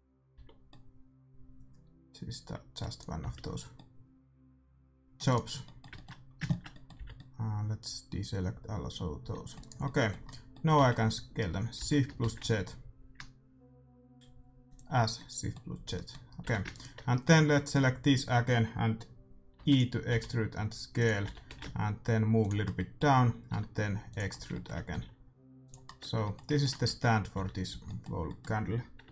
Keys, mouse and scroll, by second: 0.2 c, 3.2 c, 5.3-7.2 right drag, 5.5-8.5 middle drag, 7.0 c, 9.6-11.3 right drag, 9.8-12.1 middle drag, 10.7 z, 11.7 s, 15.2-18.2 middle drag, 16.4 a, 16.6-18.4 right drag, 19.5 e, 20.0 s, 21.2 g, 22.6 middle click, 23.4 e, 24.9 s, 25.6-29.1 middle drag, 26.0 Tab, 26.8 Tab, 27.3 a, 27.6 a.